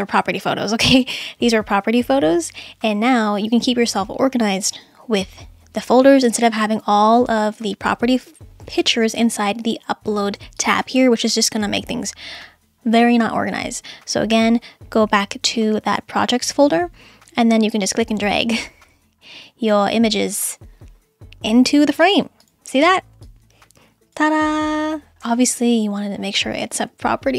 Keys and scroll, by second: 25.6 super+z, 26.8 super+z.